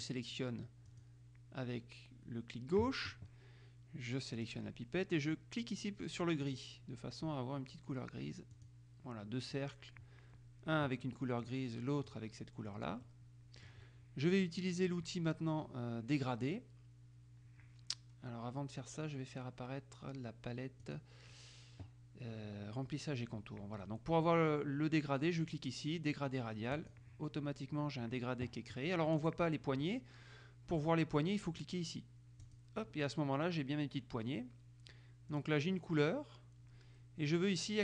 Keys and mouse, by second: 1.1 click, 4.5 click, 6.6 click, 8.7 click, 11.6 click, 12.3 click, 13.2-14.3 drag, 21.0 click, 26.9 click, 32.5 click, 35.5 click.